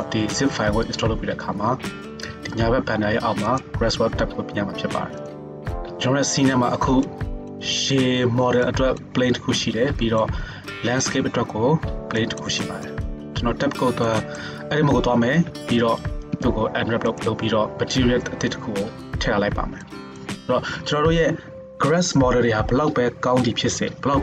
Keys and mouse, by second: 5.3-24.2 drag, 13.2 Tab, 15.5 a, 16.3 u.